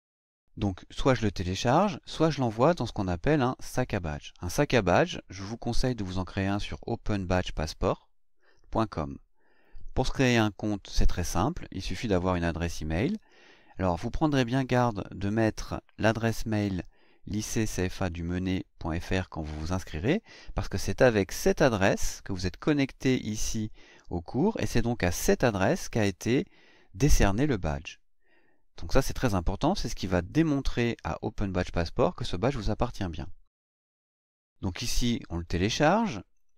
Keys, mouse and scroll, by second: 4.9 click, 21.3 click, 36.4 click.